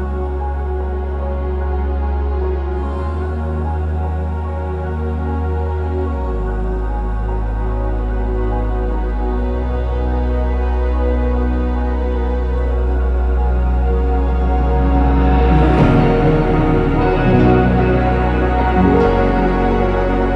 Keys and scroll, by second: 0.0-1.6 typing, 2.4 Escape, 3.5 BackSpace, 8.3 Escape, 14.2-15.1 typing, 18.1 BackSpace, 18.5 BackSpace, 18.7 BackSpace.